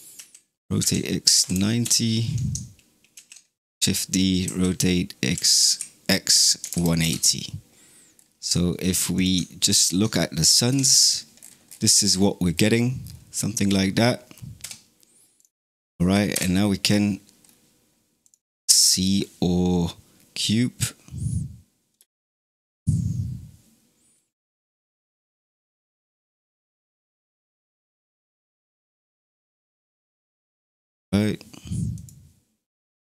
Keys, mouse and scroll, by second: 0.0 r, 3.0 shift+d, 4.3 r, 8.0-9.0 scroll down 2, 9.0 click, 9.5 shift+click, 10.5 KP_Divide, 11.2-12.6 scroll down 18, 12.9 scroll up 2, 14.5 KP_Divide, 15.3 click, 16.2 KP_0, 17.3 scroll up 2, 18.1 click, 21.9 space, 24.8 click, 25.4 click, 25.9 drag, 26.9 click, 28.4 click, 31.0 middle click, 32.0 click, 33.0 scroll down 3.